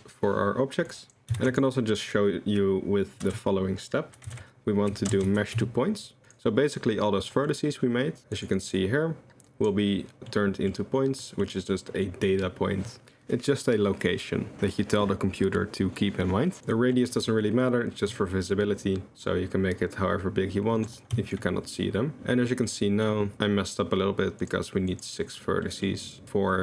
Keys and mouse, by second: 1.0 click, 1.4 shift+a, 7.2 drag, 8.3 click, 8.6 click, 9.6 click, 10.3-10.7 drag, 11.2 middle drag, 12.0 middle drag, 16.7-21.0 middle drag, 21.4 shift+middle click, 22.7-23.0 middle drag, 24.5-25.6 drag, 25.6 middle click.